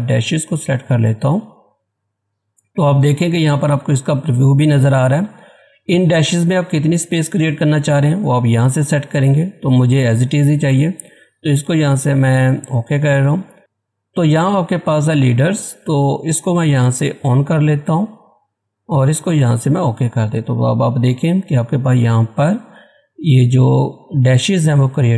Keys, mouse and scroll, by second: 0.2 click, 12.6 click, 16.0 click.